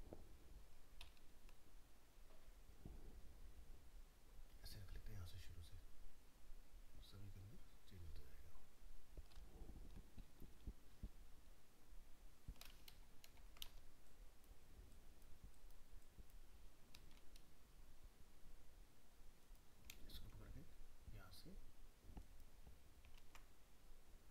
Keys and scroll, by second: 12.9 ctrl++, 23.2 ctrl+z.